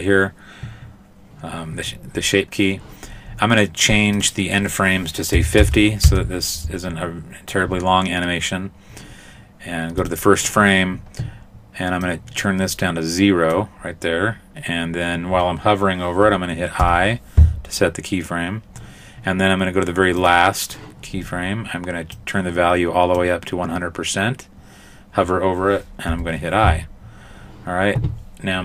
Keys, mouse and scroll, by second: 1.3 right click, 4.2 click, 10.0 click, 12.0 click, 16.8 i, 20.2 click, 22.2 click, 26.1 i.